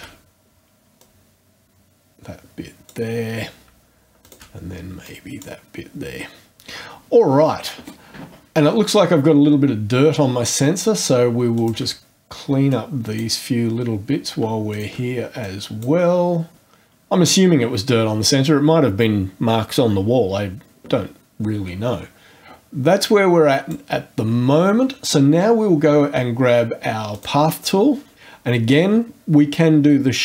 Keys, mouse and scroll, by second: 1.0-3.1 drag, 4.2 shift+click, 5.0 click, 11.6 shift+click, 12.7 click, 14.7 shift+click, 15.4 shift+click, 23.0 click, 27.1 click.